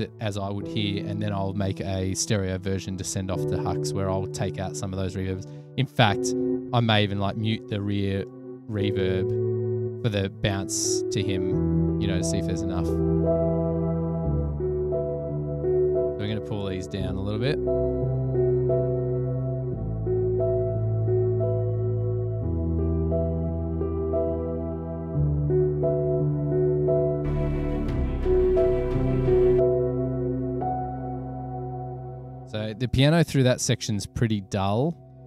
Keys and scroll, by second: 32.7 super+=.